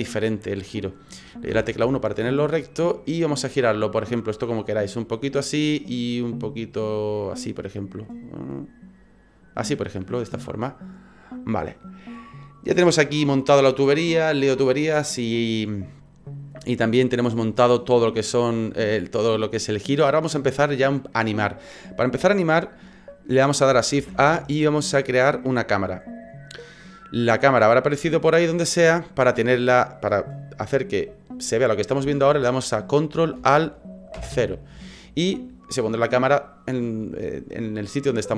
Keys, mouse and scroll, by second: 1.5 KP_1, 3.4 click, 4.6 click, 5.9 click, 8.0 click, 8.5 click, 23.9 shift+a, 34.1 ctrl+alt+KP_0.